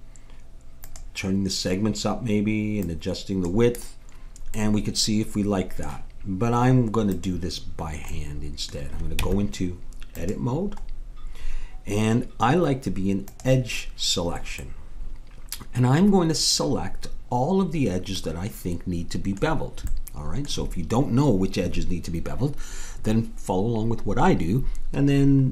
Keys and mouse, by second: 0.8-2.7 drag, 2.8-4.7 drag, 5.4 middle click, 7.1-8.8 drag, 9.1 Tab, 13.3-15.1 drag, 15.1-16.3 middle drag, 18.2-25.5 middle drag.